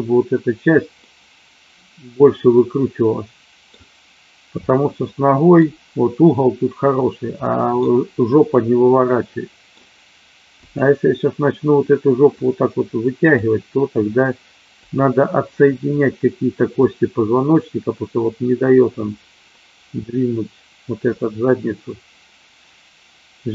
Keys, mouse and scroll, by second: 1.0-3.7 middle drag, 4.7-5.5 middle drag, 7.4-7.8 middle drag, 8.5-9.6 middle drag, 10.6 click, 12.3-13.4 drag, 14.9 click, 16.8-23.5 drag.